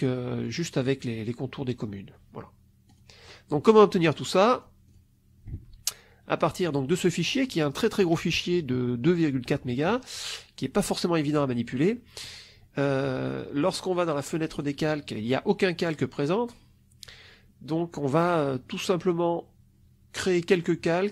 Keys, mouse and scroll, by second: 2.8 click, 4.4 click, 4.8 click, 5.6 alt+Tab, 6.3 alt+click, 13.5 click, 14.4 click, 20.7-21.1 drag.